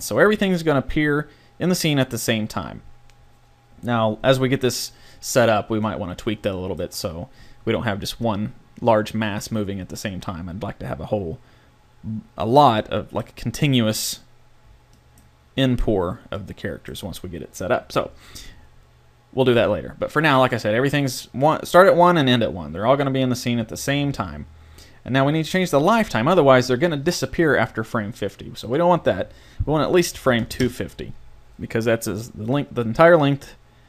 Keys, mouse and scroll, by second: 5.2-6.8 middle drag, 12.8 middle click, 14.7 middle click, 15.3-16.4 middle drag, 16.7-19.8 middle drag, 20.6-28.6 middle drag, 28.6-30.6 drag, 32.8 click.